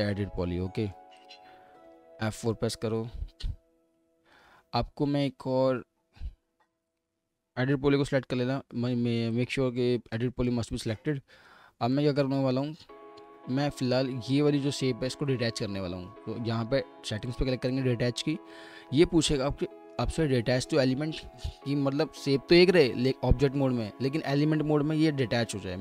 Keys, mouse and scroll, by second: 1.8 F4, 2.5 alt+middle click, 4.4 typing, 8.1 typing, 9.8 alt+middle click, 11.9 alt+middle click, 13.0-17.1 scroll down 1.